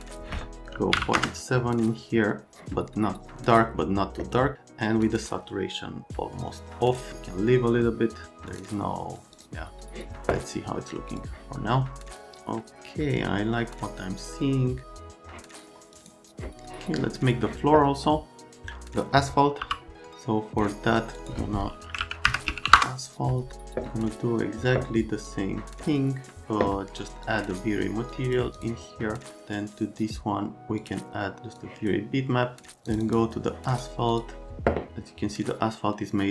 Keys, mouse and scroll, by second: 0.7 KP_Decimal, 0.9 KP_7, 1.2 KP_Enter, 5.0 click, 18.4 click, 19.7 n, 21.2 right click, 21.2 click, 21.6-23.2 typing, 27.2 click.